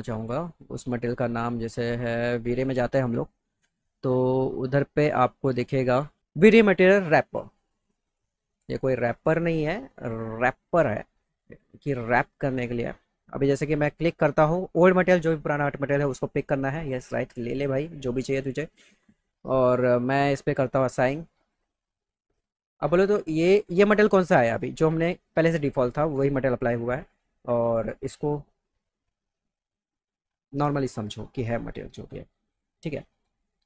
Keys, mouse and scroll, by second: 1.0 click, 2.3 click, 8.7 click, 11.1 click, 16.2 click, 21.4 click, 23.7 click.